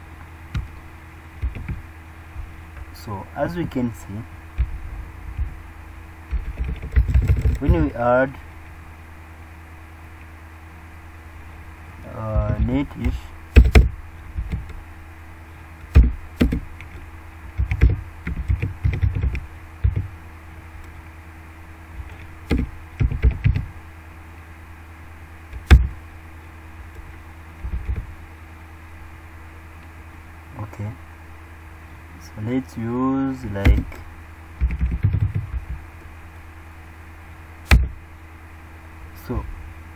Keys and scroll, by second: 1.5 ctrl+v.